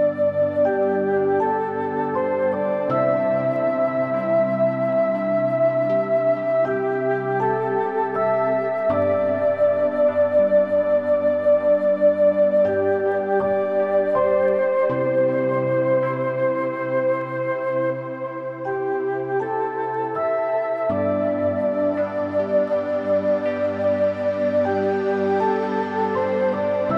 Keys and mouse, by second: 0.2 click, 0.5 click, 1.3 shift+middle click, 2.8 g, 4.0 Escape, 4.4 o, 4.7 g, 6.1 x, 6.3 y, 9.4 click, 9.6 click, 10.2 g, 10.7 y, 11.3 click, 11.8 Tab, 12.5 middle click, 13.1 middle click, 14.6 middle click, 15.0-17.1 drag, 18.5 middle click, 19.7 middle click, 20.7 click, 21.5 click, 22.3 click, 23.1 click, 23.4 click, 24.3-25.7 drag, 25.7 middle click, 26.8 ctrl+z.